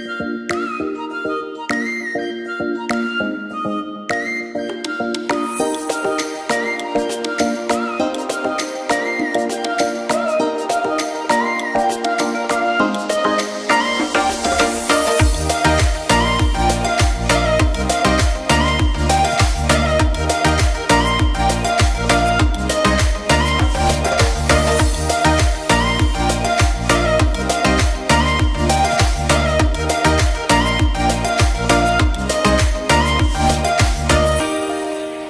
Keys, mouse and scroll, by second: 0.4 click, 0.7 shift+click, 0.9 shift+d, 2.2 g, 4.5 g, 6.1 click, 6.4 g, 7.3 click, 7.6-8.9 scroll up 4, 7.8 shift+middle drag, 8.2 shift+middle drag, 8.9 click, 9.2 x, 9.7 shift+middle drag, 9.9 click, 10.2 g, 11.1 click, 11.7 shift+middle click, 11.8 click, 12.1 s, 13.5 click, 13.7 middle click, 13.9-14.2 scroll down 5, 14.2 click, 14.6 Tab, 14.7 KP_3, 14.8 click, 15.4 click, 15.6 scroll up 1, 15.9 g, 16.0 z, 16.4-16.7 scroll up 1, 16.7 g, 16.9 z, 17.3 middle click, 17.5 scroll down 4, 17.8 click, 18.8 click, 19.0-19.5 scroll up 8, 19.5 shift+middle click, 19.8 g, 20.8 click, 21.0 click, 21.3 g, 22.5 click, 23.0 Tab, 23.1 click, 23.4 shift+d, 24.6 g, 25.7 click, 25.8 click, 26.1 shift+click, 26.3-26.9 middle drag, 26.9 click, 27.2 shift+middle drag, 27.3 scroll down 2, 27.5-27.9 shift+middle drag, 27.9 click, 28.1 shift+d, 29.0 g, 30.1 click, 30.4 scroll up 2, 30.5 middle click, 30.7-31.1 scroll down 2, 31.1 click, 31.3-31.9 scroll down 9, 31.5 middle drag, 31.9 middle click, 32.6 scroll up 2, 32.8-33.5 middle drag, 33.7 click, 33.9 click, 34.2 click, 34.5 middle click, 34.8 shift+a.